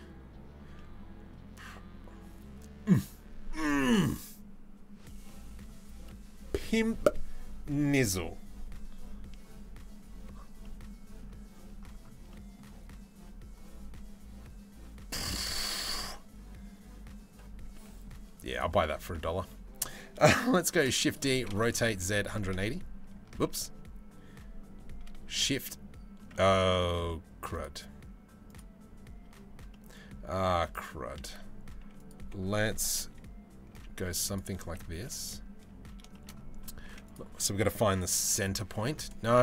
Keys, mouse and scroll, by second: 0.4-0.9 middle drag, 4.9-5.3 middle drag, 10.2-10.8 middle drag, 11.9-12.2 middle drag, 17.3-17.7 middle drag, 18.1-18.7 drag, 18.7 middle click, 20.4 shift+d, 21.0 r, 23.4 ctrl+z, 24.9 shift+r, 25.9 middle click, 27.2 click, 28.9 Tab, 29.4 middle click, 30.2 click, 30.9 2, 31.7 click, 32.7 KP_3, 33.3 z, 34.6 KP_1, 35.7 shift+middle click, 36.5 1, 36.7 click, 37.8 c.